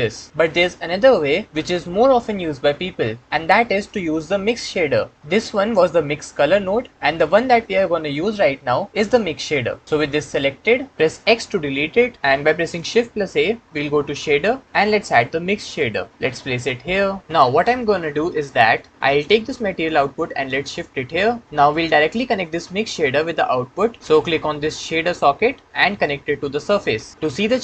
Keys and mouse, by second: 11.2 x, 12.6 shift+a, 19.5-20.7 drag, 25.0 click, 25.2-26.6 drag.